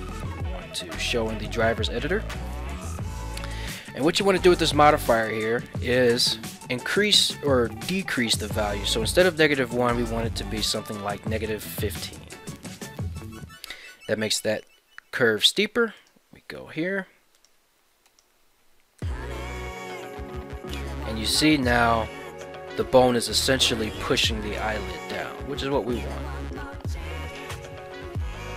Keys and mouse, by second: 17.3 right click, 17.8 ctrl+Tab, 19.0 g, 19.6 z, 26.4 right click.